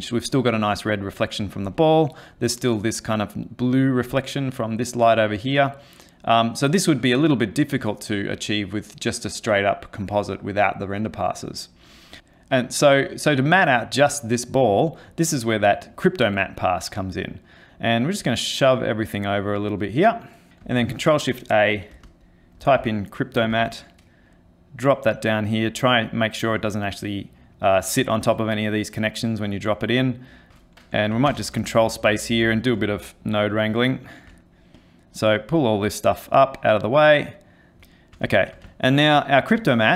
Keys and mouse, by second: 15.5 click, 16.6 click, 17.9 click, 18.8 click, 20.0 middle click, 20.5 click, 21.1 ctrl+shift+a, 31.3 ctrl+space, 31.9 middle click, 33.8 ctrl+middle click, 34.8 click, 35.3 click, 36.3 click, 37.1 click, 37.8 ctrl+middle click, 37.9 middle click, 38.3 shift+middle click, 38.7 ctrl+middle click, 39.6 click.